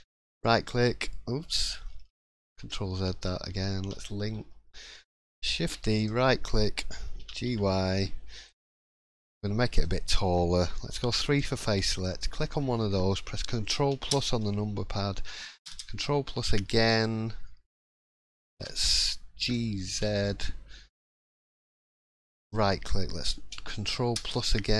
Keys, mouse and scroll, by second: 0.2 right click, 2.1 ctrl+z, 2.5 ctrl+z, 3.8 l, 4.3 l, 5.6 shift+d, 7.2 g, 8.8-9.4 scroll up 2, 8.9 middle click, 9.6 shift+middle click, 9.8-10.3 scroll up 2, 10.8 scroll up 2, 11.0 3, 11.9 click, 12.6 shift+middle click, 14.1 ctrl+KP_Add, 15.6 ctrl+KP_Add, 24.1 ctrl+KP_Add.